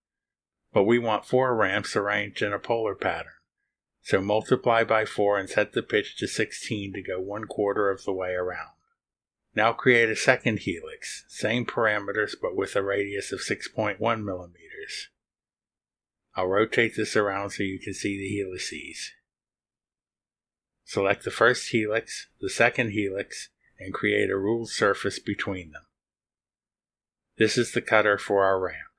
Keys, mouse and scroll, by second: 6.0 click, 6.8-7.7 typing, 8.9 click, 11.2 click, 12.4 6, 13.2 1, 15.0 click, 16.4 click, 17.4 click, 17.4 scroll down 1, 17.5-18.6 right drag, 18.9-19.3 scroll down 1, 19.3-20.7 right drag, 20.7 scroll down 1, 21.5-22.1 scroll down 1, 23.0 click, 23.8 ctrl+click, 26.9 click.